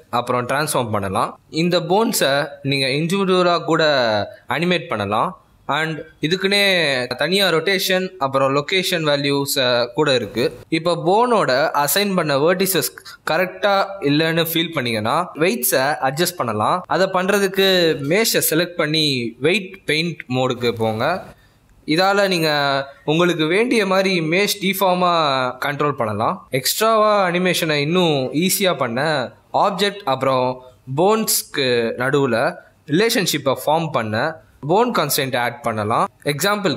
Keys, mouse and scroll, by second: 0.2 r, 1.1 s, 1.9 middle click, 2.9 click, 3.2 middle click, 4.1 r, 4.7 r, 5.3 g, 6.0 middle click, 6.4 scroll down 1, 6.5 middle click, 7.0-7.9 scroll up 1, 7.9 click, 8.3 shift+middle click, 8.6 scroll up 2, 8.8 middle click, 10.3 click, 11.5 click, 12.8 click, 12.8 shift+middle click, 12.8-13.2 scroll up 3, 13.5 click, 14.6 click, 18.3 z, 19.4 middle click, 19.9 click, 20.6 middle click, 21.0 ctrl+z, 21.2 click, 21.4 click, 21.6 middle click, 21.9 click, 22.1 click, 22.4 click, 22.5 click, 23.0 n, 23.2 n, 23.4 click, 23.7 click, 24.5 click, 24.9 middle click, 25.1 scroll down 1, 25.2 middle click, 25.4 click, 25.8 shift+middle click, 26.5 z, 27.9 middle click, 28.4 ctrl+Tab, 28.8 click, 29.0 shift+middle click, 29.4-29.8 scroll up 2, 30.3 click, 31.3 click, 33.0 shift+middle click, 33.1 middle click, 33.2 Tab, 33.4 shift+d, 33.8 g, 34.1 g, 35.3 Tab, 35.8 click, 36.1 click.